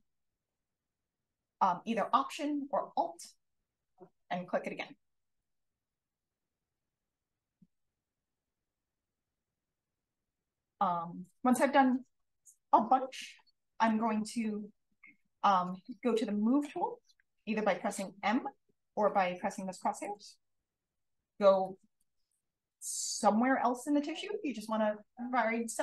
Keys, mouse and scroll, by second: 0.8 alt+click, 5.4 click, 6.0 click, 7.2 click, 18.1 m, 20.0 click, 20.9 click, 22.2 click.